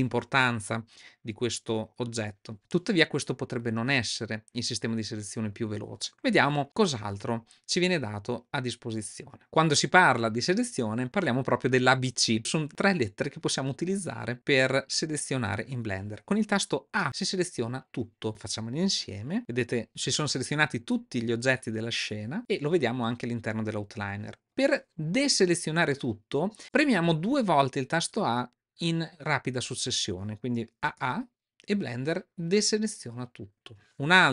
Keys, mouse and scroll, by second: 19.4 a, 20.7 middle click, 21.9-22.3 middle drag, 30.8 a, 34.1 click.